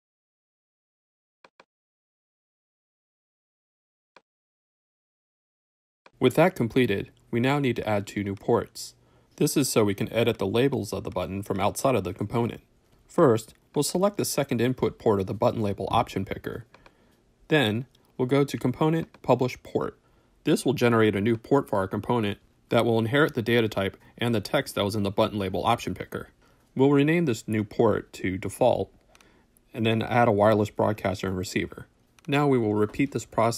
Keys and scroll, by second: 3.3 w, 26.7 shift+Return, 27.4-28.3 typing, 29.5 w, 29.8 shift+Return, 30.1 shift+Right, 30.3 space, 30.5 shift+a, 30.8 Return, 32.4 w.